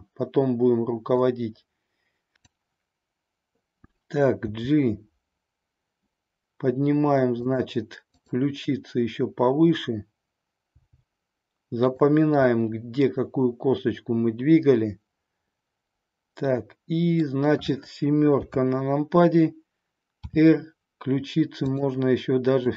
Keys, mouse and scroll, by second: 2.4-4.8 drag, 4.8 g, 7.5 click, 8.1-10.2 drag, 10.6 g, 11.9 drag, 12.4-17.2 middle drag, 18.4 KP_7, 20.2 r, 22.6-22.7 drag.